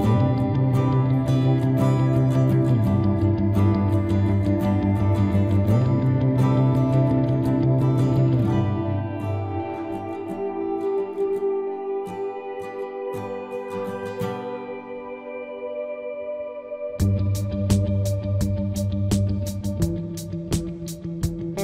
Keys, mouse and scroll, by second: 2.7 middle click, 3.7 c, 7.2-8.7 middle drag, 8.7 click, 8.9-10.6 middle drag, 9.2 c, 17.6-19.0 right drag, 17.7 z, 19.0-20.9 drag, 19.5 z, 20.2 c.